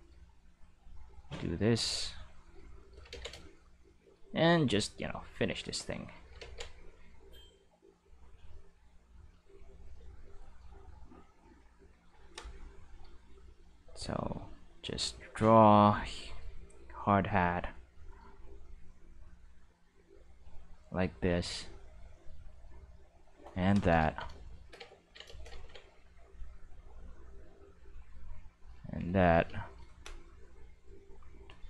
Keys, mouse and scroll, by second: 0.7-2.4 drag, 3.1 ctrl+z, 4.1 middle click, 4.4-6.0 drag, 6.4 ctrl+z, 7.1-9.3 drag, 10.6 click, 13.4-15.8 drag, 16.7 click, 18.5-20.7 drag, 21.0 shift+middle click, 21.8-23.2 drag, 26.2-28.7 drag.